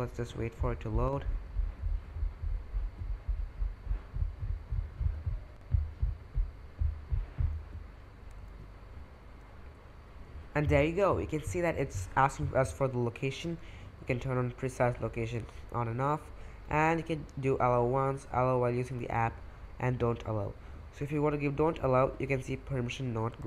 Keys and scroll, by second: 8.8 Return.